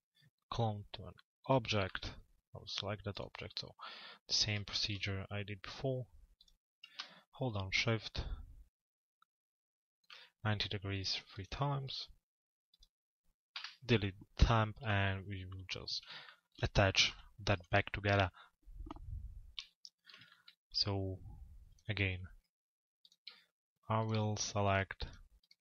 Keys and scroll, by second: 13.2 Delete, 18.1 z.